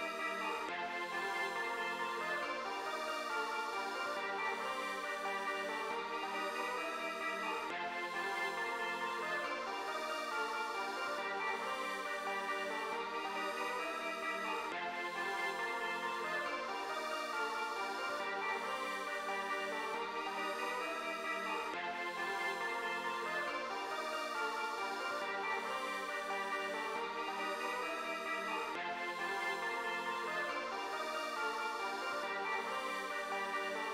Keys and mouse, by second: 2.0-3.2 drag, 3.6-4.8 drag, 5.4-7.4 drag, 11.3-13.3 drag, 16.6-17.3 drag, 18.9-20.6 drag, 22.1 click, 25.9-27.4 drag, 30.5-33.9 drag.